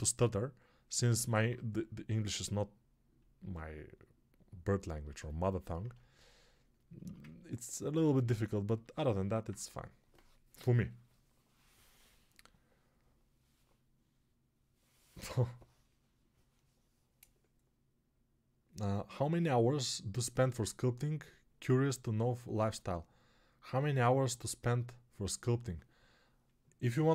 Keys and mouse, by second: 0.9 alt+right click, 1.5-27.1 ctrl+drag.